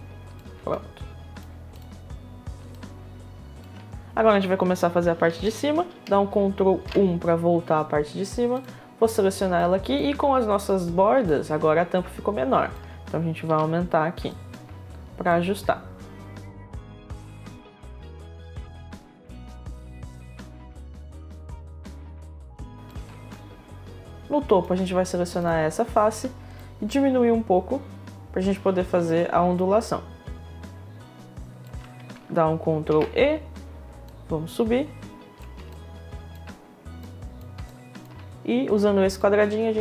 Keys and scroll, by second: 0.0 Return, 6.4 ctrl+1, 9.7 ctrl+1, 13.0 r, 19.8 w, 34.5 e, 35.9 e.